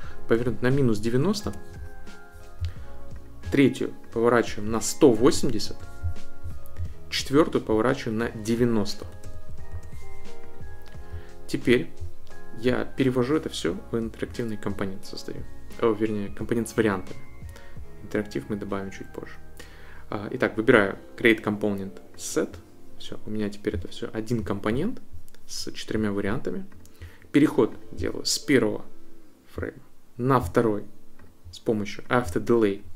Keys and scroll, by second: 0.1-1.4 typing, 4.4-5.9 typing, 9.0 9, 9.3 0, 9.7 Return.